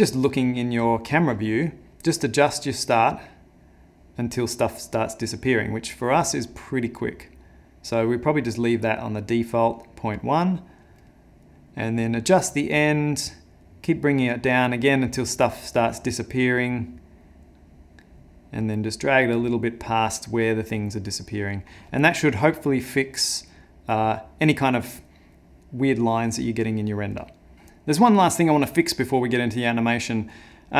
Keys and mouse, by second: 2.7 click, 12.3 click, 27.5 middle click.